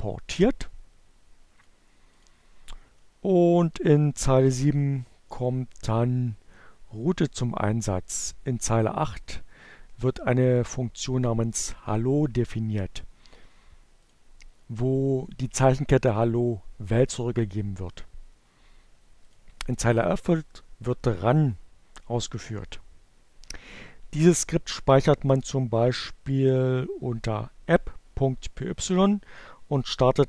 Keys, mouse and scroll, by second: 1.4 click, 7.3 click, 12.3-13.4 drag, 17.8 click, 30.1-30.2 drag.